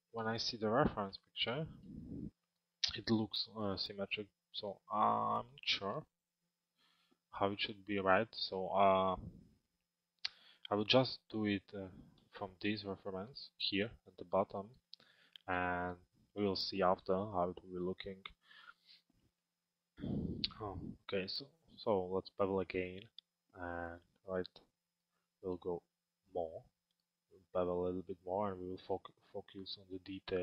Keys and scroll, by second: 10.7 f.